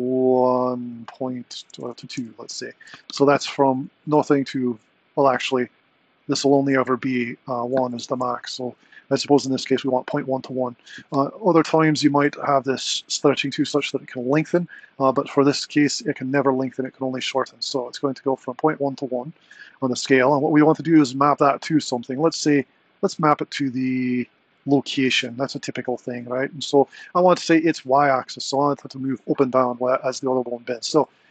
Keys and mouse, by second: 1.9 BackSpace, 7.6 click.